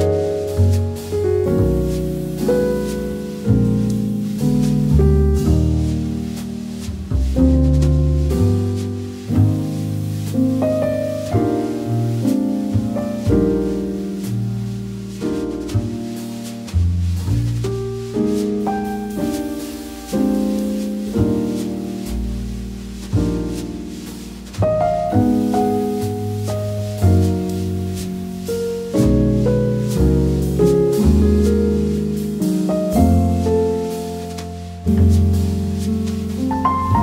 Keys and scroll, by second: 12.5 p, 20.6 space, 23.2 p, 28.7 super+z, 33.6 a, 36.7 v.